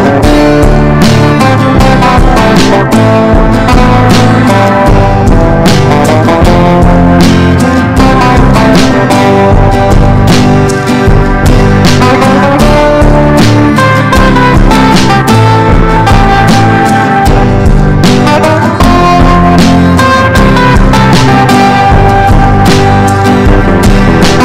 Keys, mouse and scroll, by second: 0.5-3.8 drag, 5.5 shift+click, 5.9 shift+click, 6.0 shift+click, 6.3 shift+click, 7.3 click, 8.3 ctrl+z, 9.4 click, 10.1 Delete, 10.3 click, 10.4 Delete, 10.8 Delete, 11.2 Delete, 12.9 click, 14.3 ctrl+d, 14.5 click, 15.9 ctrl+d, 16.2 ctrl+d, 16.4 ctrl+d, 16.7 click, 17.1 shift+click, 17.4 shift+click, 19.6 ctrl+g, 20.4 click, 21.6 Down, 21.7 Down, 21.9 Down, 22.9 click, 23.9 ctrl+shift+g.